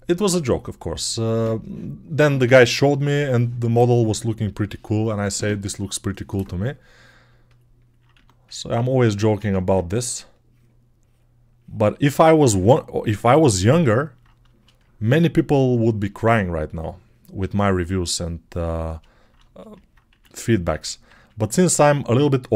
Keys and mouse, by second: 8.0 1, 9.3 alt+q, 18.8-20.8 alt+right drag, 19.9 1, 20.8-22.5 drag.